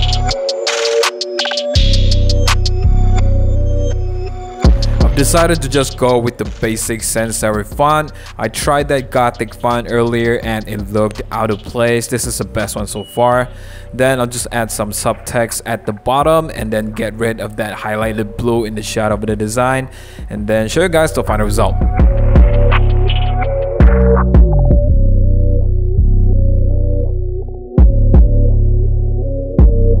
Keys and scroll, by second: 0.0-1.8 typing, 2.4 super+-, 2.4 super+-, 2.6 super+0, 3.0 super+-, 3.0 t, 4.5 super+j, 4.5 v, 4.7 super+t, 8.8 Return, 9.6 super+a, 12.4 super+d, 15.7 u, 21.9-23.9 typing, 24.3 super+-, 24.3 super+-, 24.7 super+t, 25.1 Return, 25.1 super+-, 25.2 super+-, 25.2 BackSpace, 25.3 super+0, 25.9 super+t, 26.2 Return, 26.8-28.0 typing, 28.7 super+-, 28.7 super+-, 28.8 super+-, 28.9 super+1, 29.3 t.